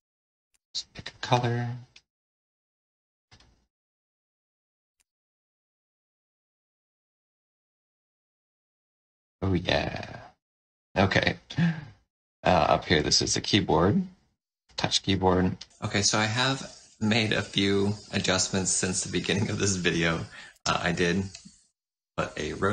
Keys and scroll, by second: 20.4 r.